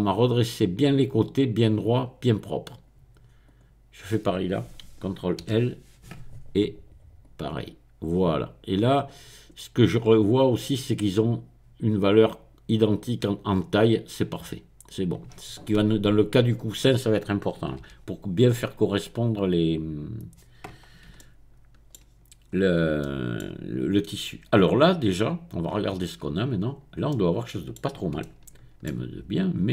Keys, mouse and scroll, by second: 3.5 click, 3.8-6.3 middle drag, 5.4 ctrl+i, 7.2 click, 9.5-10.1 scroll up 1, 10.1-10.8 scroll down 1, 10.8 scroll down 1, 15.4-16.4 scroll down 1, 16.4 scroll down 1, 17.9 n, 19.4-20.5 scroll down 2, 21.2 shift+middle click, 22.5 middle click, 22.8 shift+scroll up 1, 23.0-24.6 shift+middle drag, 26.0-27.0 drag, 27.1 middle click, 29.5-29.7 scroll down 2.